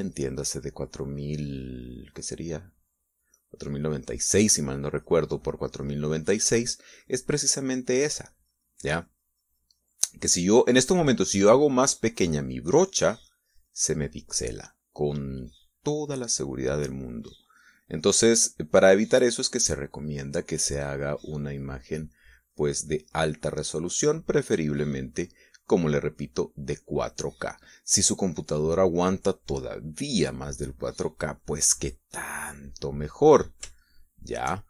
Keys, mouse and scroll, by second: 13.5-15.2 drag, 17.3-21.6 drag, 21.8 middle click, 23.0-27.7 drag, 27.8 middle click, 28.2-29.2 scroll up 2, 28.3 middle click, 29.2-33.7 drag, 34.2 shift+middle click.